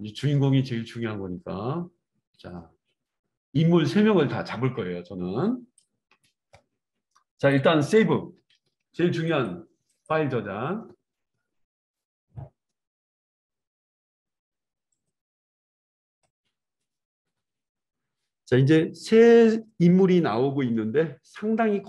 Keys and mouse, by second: 6.6-7.5 right drag, 7.5-9.3 middle drag, 8.7 ctrl+s, 8.7 ctrl+d, 9.3 click, 9.5 middle click, 9.9 click, 10.1-21.8 middle drag.